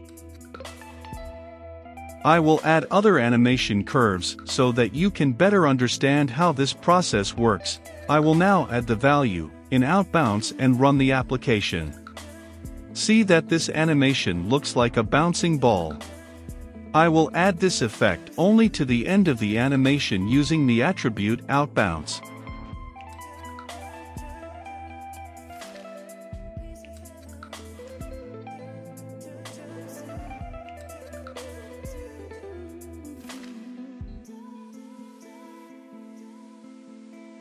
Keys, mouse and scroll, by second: 2.9 Return, 5.7-6.7 typing, 7.2 Down, 7.4 Return, 8.3-19.5 drag, 19.2-20.4 typing, 20.7 Return, 22.8 Down, 23.1 Return, 23.9-37.4 drag.